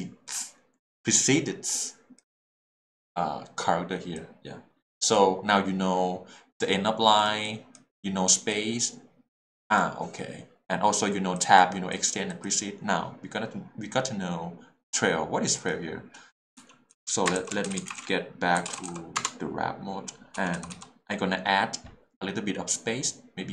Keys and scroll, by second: 16.6-19.2 typing, 19.2 Return, 20.3 h, 20.5 l.